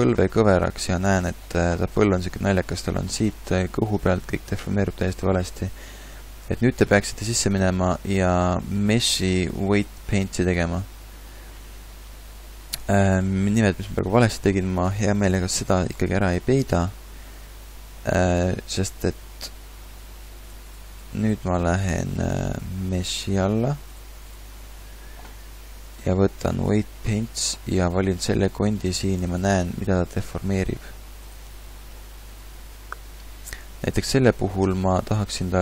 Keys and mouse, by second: 0.4 r, 7.0 click, 8.0 click, 30.0-35.6 middle drag.